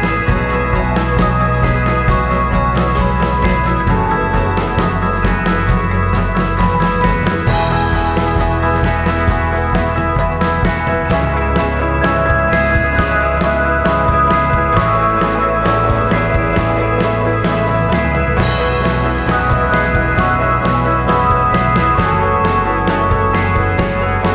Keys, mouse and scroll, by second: 0.4 scroll down 1, 3.1 scroll down 2, 3.9-7.1 drag, 7.5 alt+click, 8.7-9.4 scroll down 3, 12.7-15.6 drag, 16.1 scroll down 2, 19.1-21.1 drag, 23.8-24.3 drag.